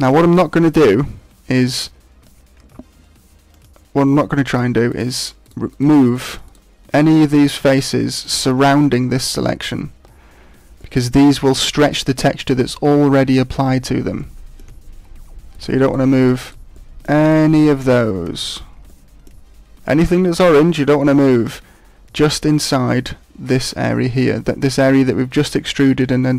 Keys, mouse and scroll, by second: 2.6 ctrl+Tab, 4.1 middle click, 4.8 right click, 5.4 shift+right click, 5.7 shift+right click, 6.1 right click, 6.4 right click, 7.0 right click, 7.5 right click, 7.7 right click, 8.3 shift+right click, 10.8 middle click, 14.2 middle click, 15.5 shift+right click, 15.8 shift+right click, 16.1 shift+right click, 16.4 shift+right click, 16.7 shift+middle click, 17.2 shift+right click, 17.8 middle click, 18.4 shift+right click, 18.8 middle click, 19.3-19.7 scroll down 6, 19.8 middle click, 21.7-22.3 scroll up 7, 26.0 middle click.